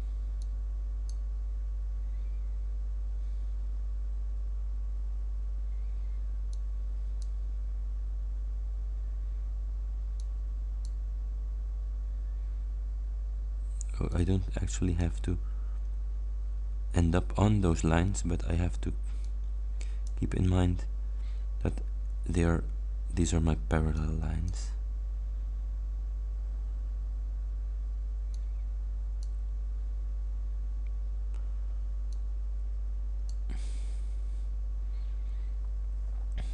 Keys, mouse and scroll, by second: 0.4-1.4 drag, 6.6 click, 10.3 click, 14.2 click, 19.3 click, 24.0 click, 28.4 click, 32.2-33.6 drag.